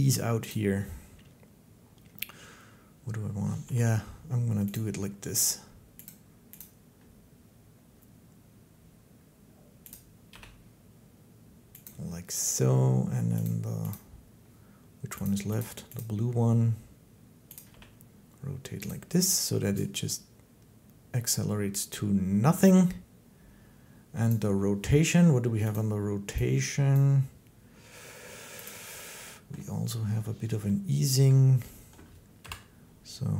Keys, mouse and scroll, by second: 0.3 click, 3.4 g, 4.6 click, 5.9 click, 6.4 click, 9.8 click, 10.2 g, 11.7 click, 13.2 click, 13.7 click, 15.1 click, 15.4 click, 15.8 click, 17.4 click, 17.5 g, 18.7 click, 24.1 click, 25.6 click, 26.8 click, 28.5 click, 29.4 middle click, 31.1-31.7 scroll, 32.2 Home.